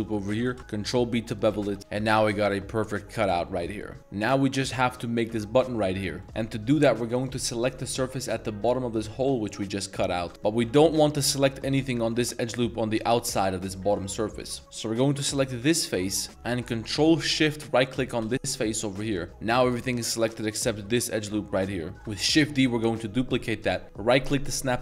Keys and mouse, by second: 0.0 middle click, 0.4 ctrl+b, 1.6 z, 1.8 Tab, 1.8 middle click, 2.2-2.5 middle drag, 3.0 middle drag, 3.3 middle drag, 3.7 middle click, 4.0 Tab, 6.2 middle click, 7.2 click, 7.6 z, 9.2 z, 10.2 a, 10.3 z, 10.4 z, 10.6 z, 10.8 alt+right click, 12.0 middle drag, 13.8 middle click, 14.5 middle click, 14.6-16.3 z, 15.4 right click, 15.7-16.1 ctrl+middle drag, 16.4 middle click, 17.9 ctrl+shift+right click, 18.3 z, 18.9 middle click, 21.3 middle click, 21.9 z, 22.2 shift+d.